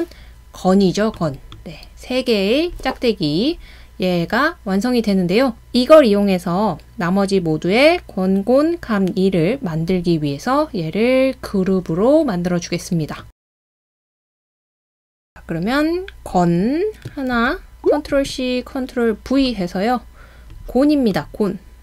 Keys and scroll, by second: 17.3 super+c, 18.1 super+v.